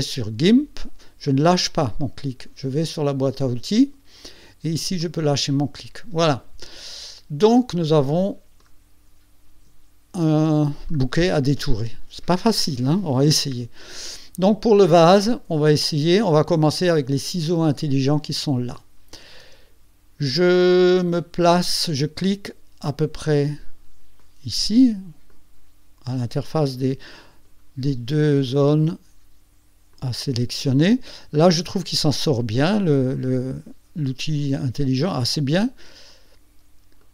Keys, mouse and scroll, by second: 6.9 ctrl+scroll up 2, 7.9 ctrl+click, 8.7 scroll up 2, 9.8 ctrl+scroll down 2, 10.4 ctrl+click, 18.4 click, 19.7-20.4 ctrl+scroll up 4, 20.4-20.9 ctrl+scroll down 2, 24.2 click, 25.3 click, 26.2 scroll up 1, 27.1 click, 29.9 click, 31.2-31.7 ctrl+scroll up 4, 33.4 click, 36.1 click, 37.0 middle click.